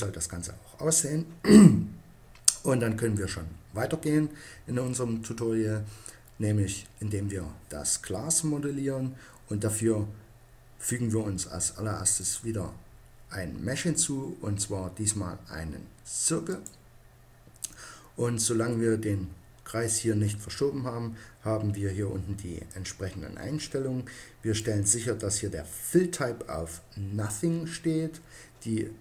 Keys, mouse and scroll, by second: 0.0 Escape, 12.1-13.8 drag, 22.6 click, 23.2 click.